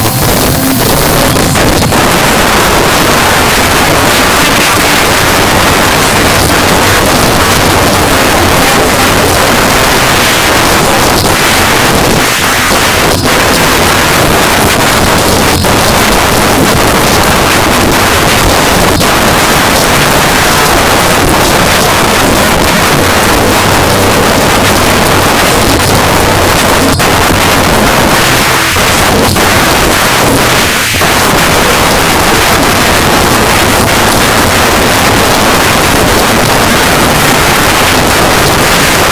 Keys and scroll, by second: 1.1 Page_Down.